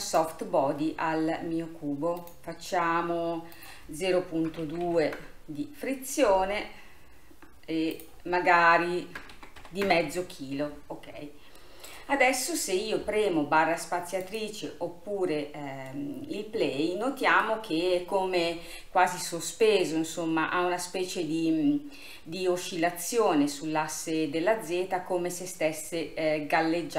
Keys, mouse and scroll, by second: 0.1-11.6 drag, 11.6-14.3 middle drag, 14.3-16.0 drag, 16.0-17.9 middle drag, 17.9-19.3 scroll up 1, 19.3-19.9 scroll up 1, 19.9-22.9 middle drag.